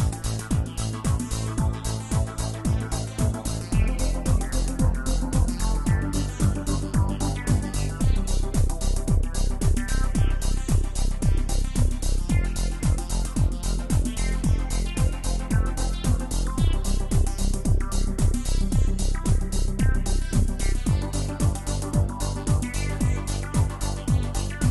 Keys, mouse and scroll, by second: 1.8-2.2 scroll down 3, 3.0 click, 6.4 click, 8.4 drag, 10.6-11.0 drag, 11.0 scroll down 4, 12.1 click, 16.0 click, 16.5-19.0 drag, 19.0-21.8 middle drag, 21.8 click, 22.8-23.3 scroll up 5, 23.8-24.2 scroll down 2.